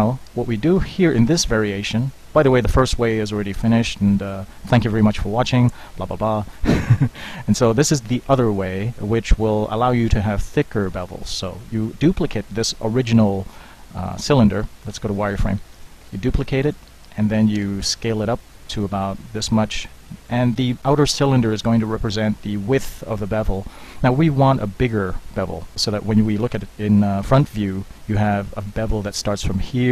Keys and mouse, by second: 0.5 KP_1, 0.8 KP_3, 7.1-12.6 middle drag, 14.9 z, 15.8 shift+d, 17.6 s, 26.6 KP_1.